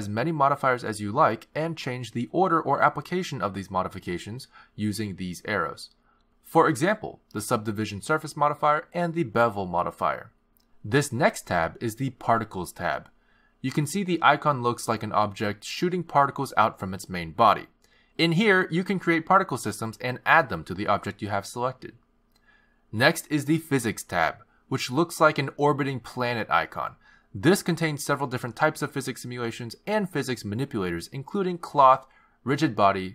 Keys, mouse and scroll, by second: 2.5 click, 3.7 click, 4.5 click, 7.8 click, 8.5 click, 9.6 click, 10.0 click, 11.5 click, 14.3 click, 19.5 click, 24.8 click.